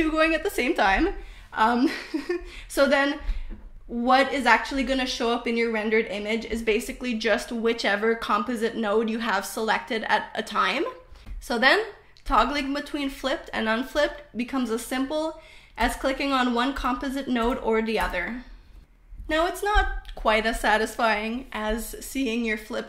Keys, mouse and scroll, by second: 1.7 middle click, 2.7-4.3 drag, 7.3 click, 8.3 click, 9.7 click, 10.7 click, 11.7 click, 12.6-14.2 drag, 16.1 click, 17.5 click, 18.5 click, 19.7 click, 20.5 click, 21.4 click, 22.4 click.